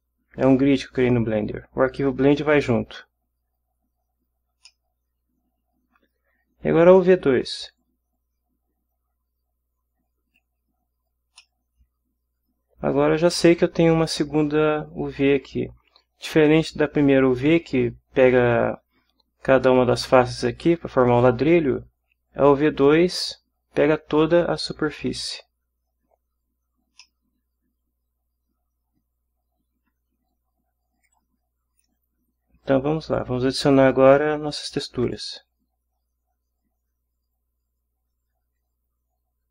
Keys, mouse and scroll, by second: 4.7-6.2 middle drag, 7.8-10.5 drag, 11.3 scroll up 1, 11.4-13.3 middle drag, 13.3 scroll down 1, 17.7 scroll up 1, 27.0-29.9 middle drag, 29.9-31.1 scroll down 1, 31.1-32.0 drag, 32.0-32.7 scroll down 1, 32.7-33.3 drag, 35.0 click.